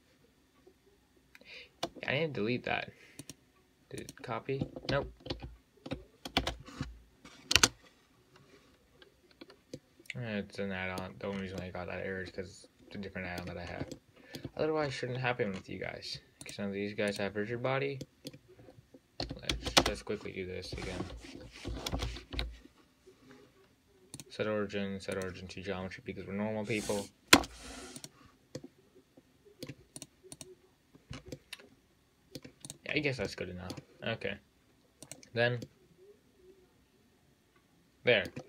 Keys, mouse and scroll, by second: 3.5 click, 4.3 click, 5.1 ctrl+z, 5.6 ctrl+z, 6.7 space, 10.0-11.6 middle drag, 11.6 scroll up 1, 11.8-13.9 middle drag, 13.9 scroll up 2, 14.2-14.8 shift+middle drag, 14.8-15.1 scroll down 4, 15.1-15.5 scroll up 2, 15.5 scroll down 4, 15.7-16.7 scroll up 4, 16.7 click, 17.3 click, 17.7-18.3 scroll down 1, 18.3-19.5 middle drag, 19.5 a, 20.0 space, 27.6 Return, 28.2 click, 28.8-30.2 middle drag, 30.2 drag, 30.6 click, 31.3 scroll up 5, 31.6-32.9 middle drag, 32.9 click, 33.1-33.5 scroll down 1, 33.5-35.3 middle drag, 35.3-35.7 drag, 35.9-38.4 middle drag.